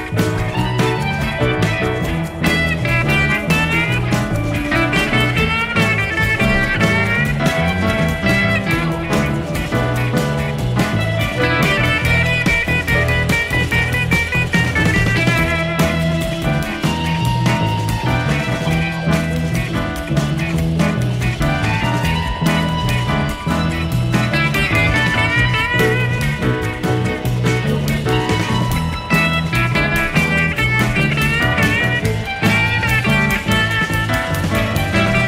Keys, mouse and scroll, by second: 1.0 click, 2.5-4.0 drag, 4.5 click, 4.8 space, 8.5 shift+F6, 11.1 click, 12.6 click, 13.5 click, 14.1 click, 15.3 click, 16.4 click, 17.9 click, 19.9 click, 20.8 click, 21.3 space, 24.8 KP_Add, 25.8 space, 28.0 shift+F6, 31.0 click, 31.8 click.